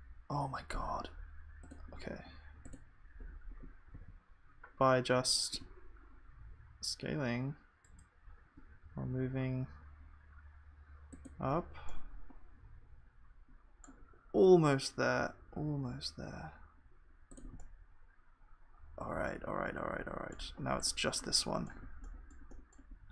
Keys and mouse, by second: 12.4-15.7 middle drag, 17.6-19.6 middle drag, 20.1-23.1 middle drag.